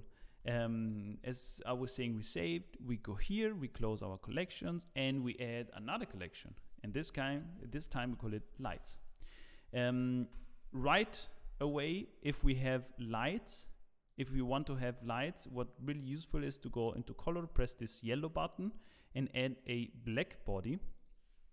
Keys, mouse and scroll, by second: 0.4 ctrl+s, 0.4 click, 0.7 middle click, 1.1-2.2 scroll down 12, 1.9 middle click, 3.0 click, 4.9 click, 4.9 right click, 6.3 click, 10.4 middle click, 10.4 KP_0, 11.1-12.6 scroll up 1, 14.0 click, 14.0 scroll up 1, 19.6 click.